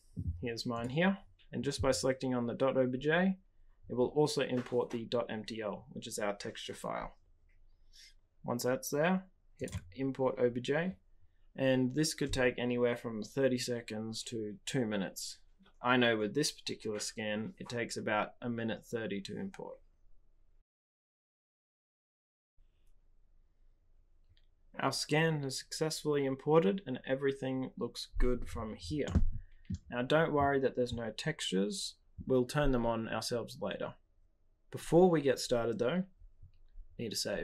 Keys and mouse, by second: 29.0-29.7 middle drag.